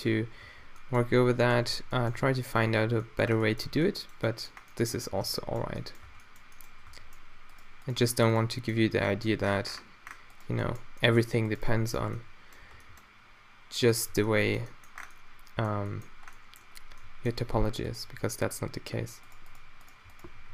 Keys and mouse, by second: 0.4 b, 1.4 click, 1.7 Tab, 2.1 Tab, 2.6 a, 3.6 Tab, 5.3 Tab, 6.0 Tab, 6.9 Tab, 8.6-10.1 drag, 9.0 g, 10.7-13.9 drag, 12.8 g, 14.1 Tab, 15.9 middle drag, 17.5 Tab, 18.1 g, 20.4 g.